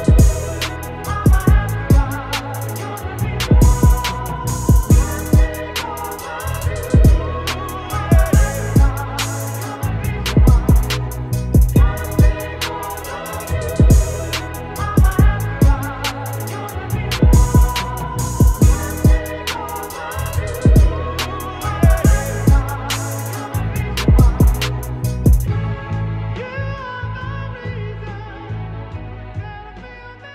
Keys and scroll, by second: 0.1 ], 1.9 ctrl+z, 5.9 ctrl+0, 6.5 ctrl+0, 6.7 -, 7.5 space, 9.8 ctrl+shift+g, 15.9 ctrl+], 16.4 ctrl+space, 21.8 d, 22.1 alt+BackSpace, 22.6 ctrl+alt+d.